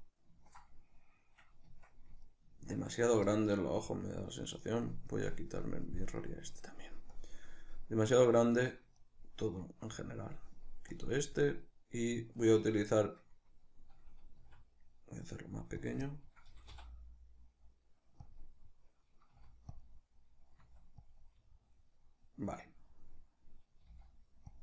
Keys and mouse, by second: 1.7 Tab, 5.7 click, 6.2 right click, 7.2 click, 8.6 right click, 9.0 shift+right click, 9.9 right click, 11.0 click, 11.5 right click, 12.4 shift+right click, 12.7-14.5 shift+right drag, 14.5 s, 15.9 click, 16.1-18.4 middle drag, 16.5 g, 18.4 click, 18.6-19.9 middle drag, 19.4 s, 19.9 click, 20.0-21.2 middle drag, 20.7 s, 21.2 click, 21.3-24.6 middle drag, 23.9 g.